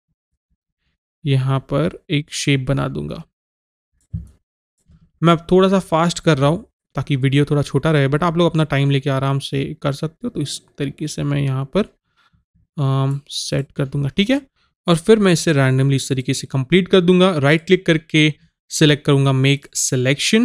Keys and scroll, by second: 14.5 ctrl+z.